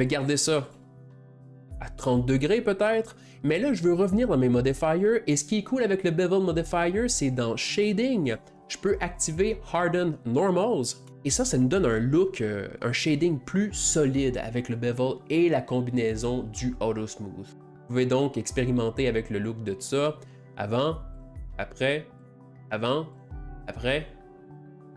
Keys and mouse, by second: 1.5 click, 3.6 drag, 5.0 click, 8.2-10.3 drag, 10.7 click, 17.7 click, 21.2 click, 22.2 click, 23.1 click, 24.3 click.